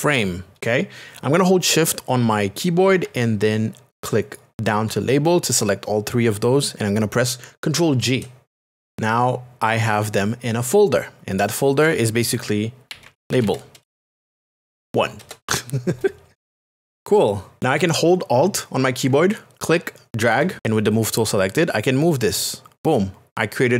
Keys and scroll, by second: 0.0-0.3 typing, 0.6 Return, 8.9 space, 12.6-15.2 typing.